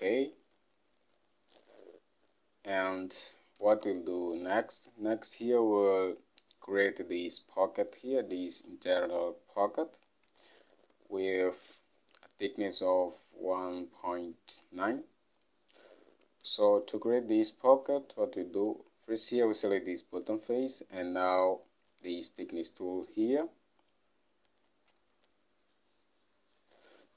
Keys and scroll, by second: 3.7 ctrl+Tab, 16.6 ctrl+Tab.